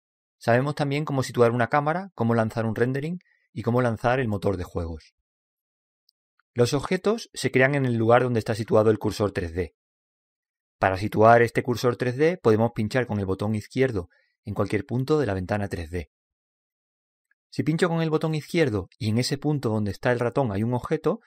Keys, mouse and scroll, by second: 18.5-20.4 drag, 19.2-21.2 middle drag.